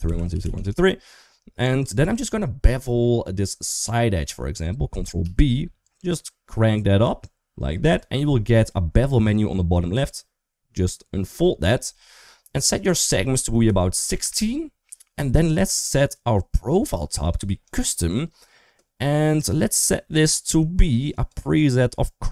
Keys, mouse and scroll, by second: 0.0-0.3 typing, 1.9 2, 2.5 click, 2.8-3.8 middle drag, 5.0 ctrl+b, 11.0 click, 12.5-14.0 drag, 17.4 click, 20.9-22.3 drag.